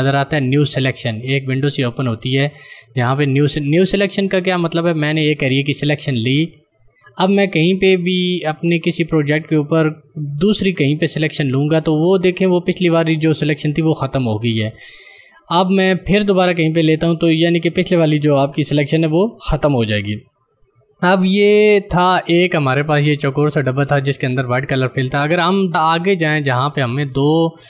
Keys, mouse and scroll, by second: 5.6 ctrl+click, 11.3 ctrl+click, 16.8 ctrl+click.